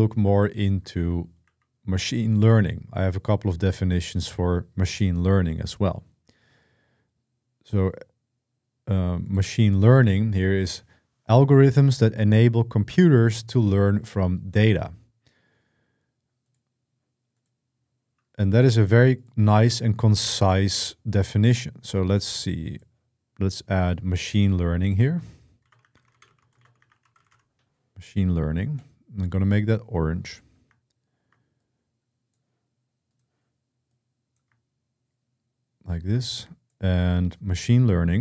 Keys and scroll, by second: 0.7 ctrl+w, 1.2 ctrl+w, 25.2-27.6 typing, 30.6 typing.